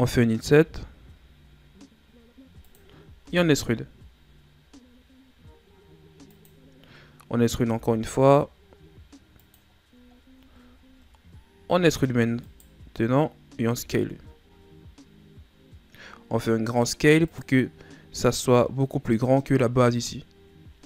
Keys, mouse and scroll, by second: 0.6 i, 3.2 e, 7.7 e, 9.7 scroll down 2, 10.2-10.9 shift+scroll up 2, 10.9-11.7 ctrl+scroll down 1, 11.7 e, 17.8 scroll down 4, 18.3-20.7 middle drag, 20.7 s.